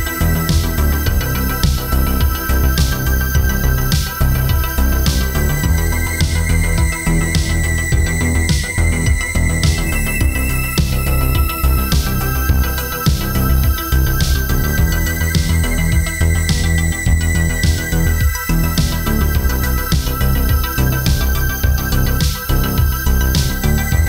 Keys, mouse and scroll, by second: 0.3 shift+d, 1.1 click, 2.5 shift+d, 3.2 click, 4.0 shift+d, 4.6 click, 7.0 shift+d, 7.6 click, 8.4 click, 11.6 shift+f, 12.6 shift+d, 13.5 click, 16.8 click, 18.4 shift+d, 19.3 click, 22.0 shift+d, 22.8 click.